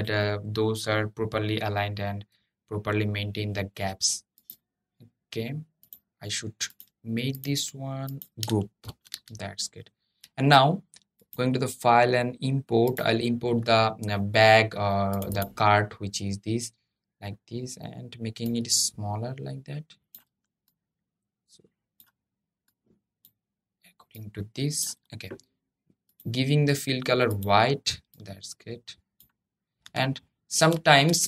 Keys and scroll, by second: 8.6 super+g.